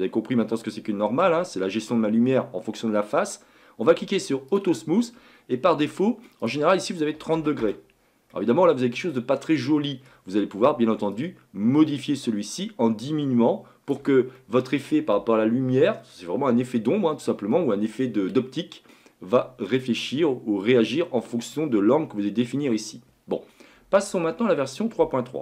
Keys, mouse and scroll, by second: 4.5-6.0 drag, 6.4-8.3 drag, 8.3-10.1 middle drag, 10.1-11.1 scroll up 1, 11.1-14.1 drag, 14.4-23.0 middle drag.